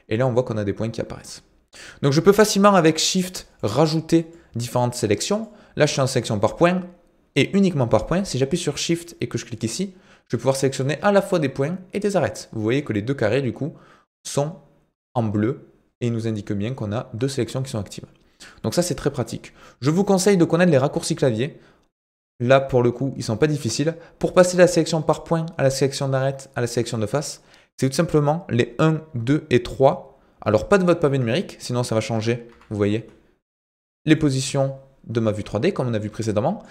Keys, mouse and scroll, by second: 3.6 click, 4.3 click, 5.4 click, 9.6 shift+click, 18.5 click, 34.2-35.6 middle drag, 36.2 middle click.